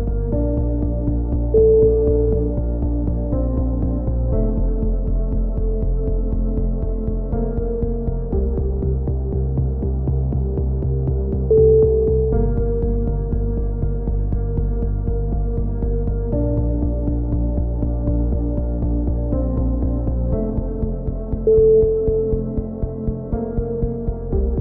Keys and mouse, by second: 0.3 v, 0.9 ctrl+z, 1.7 click, 2.4 v, 3.0 click, 4.4-5.6 right drag, 5.4 alt+m, 6.4 a, 7.4-8.6 drag, 7.7 right click, 8.1 x, 9.3-10.9 drag, 10.7 f, 11.1-12.5 drag, 12.2 f, 12.5 a, 13.0 click, 14.6 click, 14.7 right click, 15.2 e, 16.1-18.3 drag, 17.2-18.5 right drag, 18.3 f, 18.5 a, 18.7 z, 18.9 click, 20.8-22.8 drag, 21.5 z.